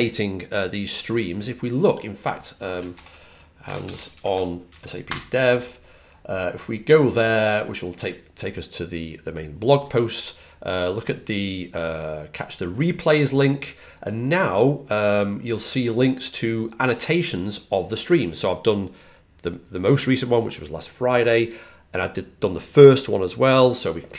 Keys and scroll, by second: 3.3-5.4 typing, 8.9 typing.